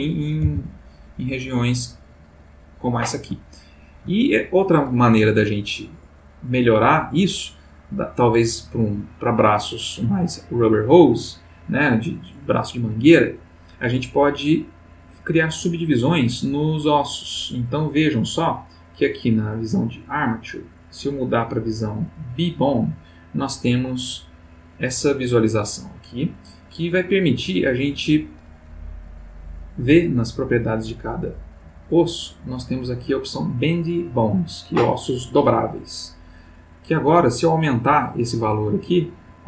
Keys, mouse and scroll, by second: 0.5 r, 2.6 click, 3.5-4.1 ctrl+middle drag, 11.1 click, 15.9 ctrl+middle click, 17.9 click, 19.3 click, 20.7 click, 22.1 click, 23.8-26.9 middle drag, 27.2 middle click, 29.2 click, 32.7 click, 36.7-39.4 drag.